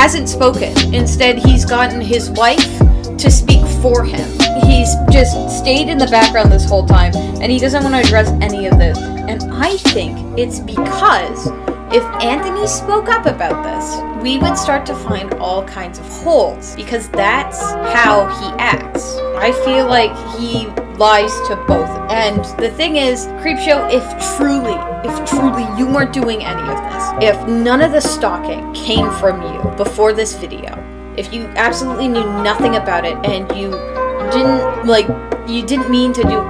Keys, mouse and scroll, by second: 1.7-4.1 typing, 7.2-8.1 typing, 9.2 e, 9.5 p, 10.4 space, 16.0 space, 16.6 space, 17.0 space, 27.7 space, 30.3 right click, 30.7 right click, 33.9 right click.